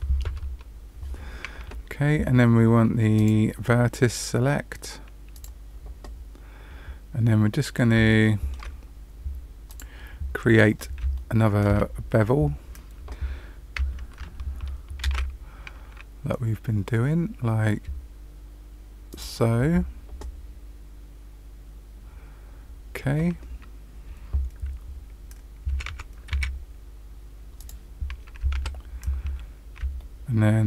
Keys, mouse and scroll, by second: 3.1 click, 5.3 click, 6.4-7.2 scroll down 1, 7.2-7.9 scroll up 1, 7.9 scroll up 1, 8.2 shift+middle click, 9.6 click, 10.3-10.9 scroll up 3, 11.1 shift+middle click, 11.9-13.7 scroll up 3, 15.0 ctrl+shift+b, 25.6 g, 28.5 ctrl+z, 29.3-29.7 scroll down 2, 29.9 shift+middle click.